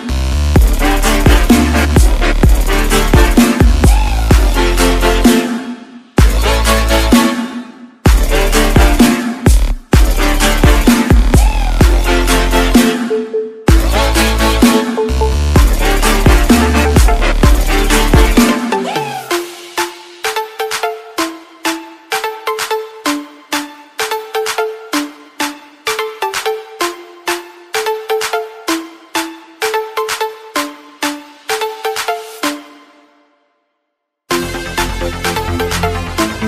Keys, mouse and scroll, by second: 0.0 alt+Tab, 1.0 alt+click, 2.9 click, 3.4-4.4 scroll down 1, 4.4-5.2 scroll up 1, 5.2 click, 5.7 scroll down 1, 6.0-6.3 scroll up 1, 6.3 click, 8.0-8.5 scroll up 1, 8.9 click, 13.5 Up, 14.5 Return, 15.9 click, 19.0 Return, 19.7 click, 26.0 click, 28.9 click, 35.2 click.